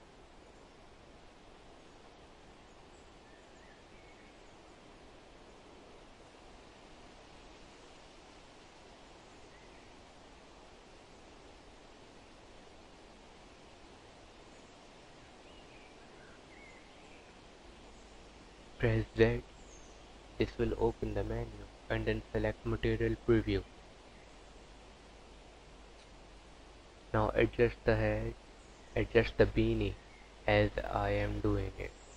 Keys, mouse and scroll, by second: 0.6 alt+z, 3.5 s, 5.2 g, 5.9 f, 6.6 g, 8.2 click, 8.5 Tab, 8.8 click, 9.0 alt+z, 9.2 click, 10.0 click, 12.4 click, 12.9 Tab, 14.3 Tab, 14.8 click, 16.0-16.5 scroll down 1, 16.5 KP_3, 17.1 scroll down 7, 17.5 scroll up 4, 18.5 z, 24.3 scroll up 1, 24.8 r, 26.0 g, 28.6 g.